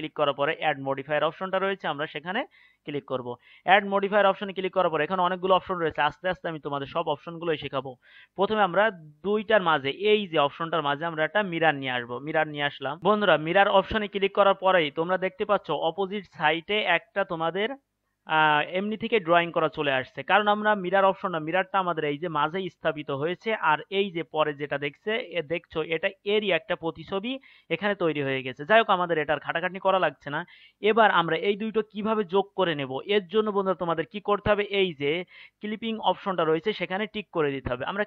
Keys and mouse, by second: 1.0-3.0 middle drag, 3.0-11.7 right drag, 11.7 middle click, 13.0 n.